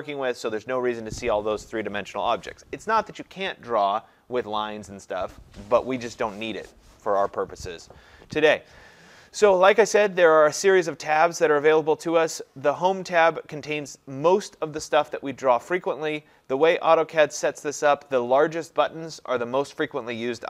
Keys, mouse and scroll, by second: 12.9 click.